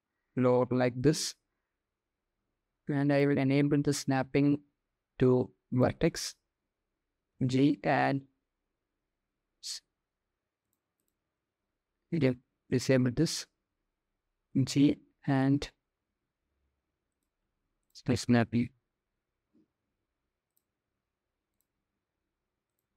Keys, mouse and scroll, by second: 2.8-5.7 drag, 6.9 g, 10.7-12.8 drag, 14.1 g, 17.1 ctrl+z, 17.4-19.1 drag, 20.1-22.9 drag.